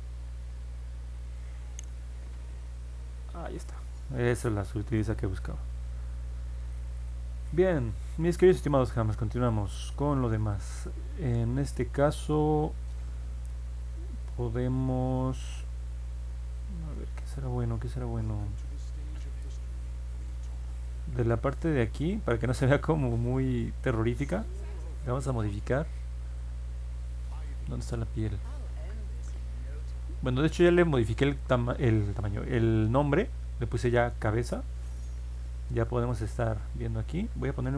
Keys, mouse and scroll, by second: 0.1 click, 0.5 click, 1.0 click, 4.1 click, 6.1 middle click, 7.0 scroll down 2, 9.1 alt+middle click, 11.0-11.3 scroll down 2, 11.6 middle click, 12.3-13.8 alt+middle drag, 14.5-14.8 scroll down 4, 15.0 scroll up 2, 15.5 alt+middle click, 16.9-20.2 middle drag, 21.2 middle click, 21.6-22.2 scroll up 2, 22.6-24.0 alt+middle drag, 27.9 middle click, 28.1 middle click, 29.0-29.4 scroll down 2, 29.6-30.0 scroll up 2, 30.8 click, 35.1 middle click.